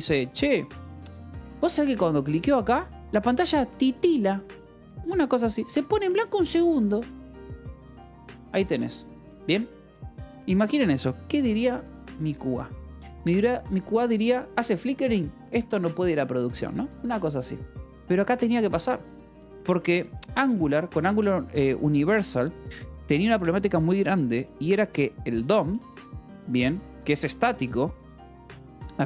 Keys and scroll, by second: 13.1 Escape, 13.8 a, 14.4 Escape, 14.9 b, 15.3 Escape, 17.6 l, 19.6 o, 19.9 =, 20.1 space, 25.6 space, 26.9-29.0 typing.